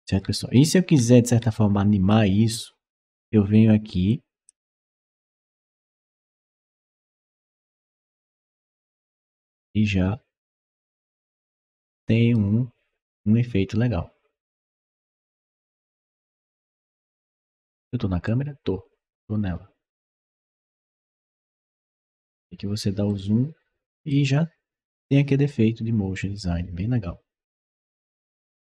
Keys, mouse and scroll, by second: 0.7 w, 3.9 click, 5.2 click, 8.9-12.2 right drag, 18.1-21.8 right drag, 19.3 s, 20.0 w, 20.5 d, 20.8 w, 22.2 middle click, 22.9-23.9 right drag.